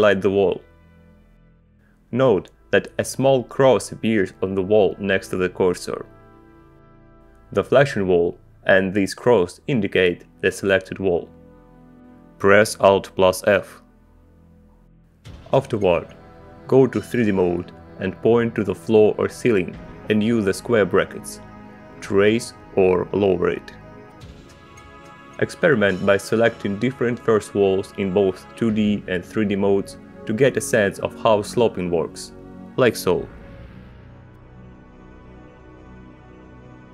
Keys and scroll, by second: 0.4 Return, 14.1 alt+f, 17.6 Return, 21.1 ], 24.5 [, 31.0 Up, 31.9 Down, 33.5 alt+f, 35.3 Return, 36.5 alt+f.